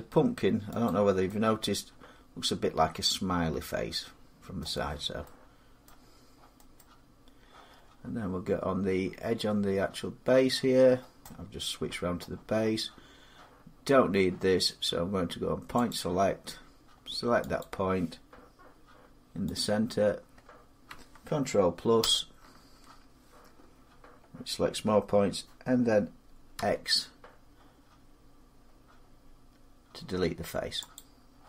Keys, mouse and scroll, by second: 0.7 click, 4.4 middle click, 4.7-5.1 scroll, 5.1 scroll down 6, 5.8 middle click, 5.8 scroll down 2, 6.6 middle click, 6.6-9.7 scroll up 1, 10.7 scroll, 11.0 scroll down 5, 12.0-15.7 middle click, 15.7 click, 17.7 click, 20.3 click, 21.8 ctrl+KP_Add, 26.3 ctrl+x, 30.8 click.